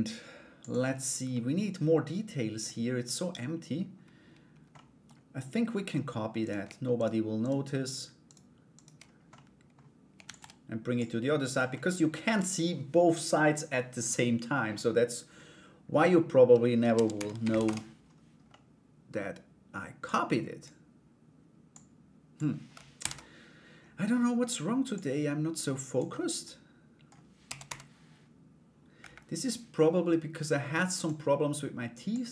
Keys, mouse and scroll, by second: 0.2 click, 0.9-2.2 middle drag, 4.3 middle click, 6.0 right click, 7.8 shift+right click, 8.3 shift+right click, 8.9 middle click, 9.8 shift+d, 10.6 click, 11.3 scroll up 1, 11.4 middle click, 11.7-12.9 scroll down 1, 18.0 middle click, 19.6 click, 21.3 click, 23.1 ctrl+z, 24.5-25.5 drag, 25.7-26.7 middle drag, 31.7-32.3 drag.